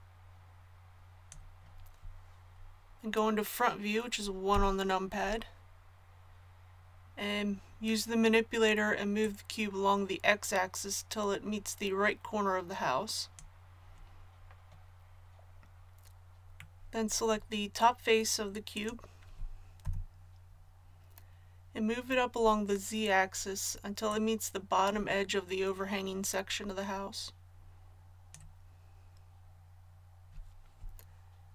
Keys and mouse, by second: 4.5 KP_1, 9.2-23.2 drag, 19.8 KP_1, 24.1-31.5 drag.